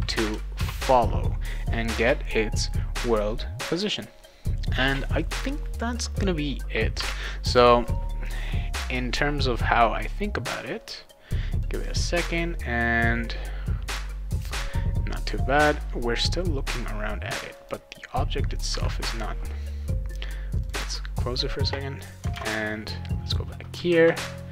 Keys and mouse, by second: 0.2 Return, 0.5 ctrl+s, 11.5 click, 17.5 click, 20.6 click, 22.0 click, 22.3 alt+Tab, 23.9 ctrl+s.